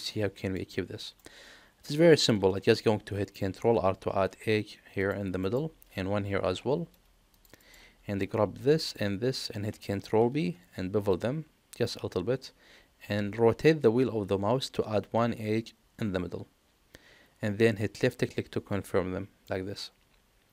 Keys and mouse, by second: 0.5 middle click, 3.6 ctrl+r, 6.4 ctrl+r, 8.8 alt+shift+click, 10.2 ctrl+b, 19.4-20.5 middle drag.